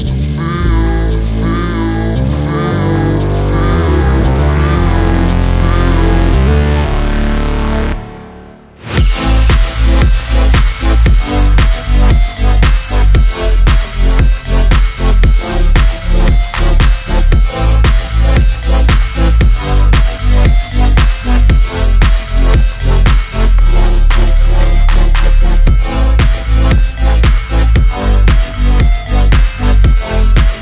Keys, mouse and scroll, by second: 1.3 1, 1.6 alt+z, 2.0 click, 2.4 shift+click, 3.0 shift+click, 3.5 shift+click, 4.9 shift+click, 5.4 shift+click, 6.8 s, 10.1 ctrl+click, 10.5 Tab, 10.7-11.1 scroll down 4, 11.0 scroll up 2, 11.1-11.9 scroll down 2, 11.9 click, 12.6 alt+z, 13.0 click, 13.1 g, 13.4 right click, 13.6 click, 13.8 g, 14.4 g, 14.5 right click, 16.9 shift+a, 19.6-20.4 scroll down 1, 21.3 click, 26.4 click, 28.9 click, 30.1-30.6 drag.